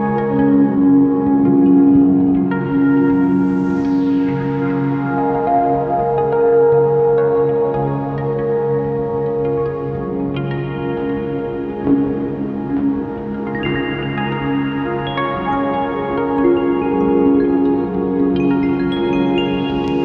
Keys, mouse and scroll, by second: 5.1 ctrl+click, 5.6 ctrl+shift+click, 5.8 scroll up 1, 5.9 `, 7.0 click, 7.2 ctrl+t, 8.0-9.7 drag, 8.4 ctrl+z, 9.9 click, 11.8 click, 14.0 alt+a, 17.0 click, 18.6 ctrl+shift+click.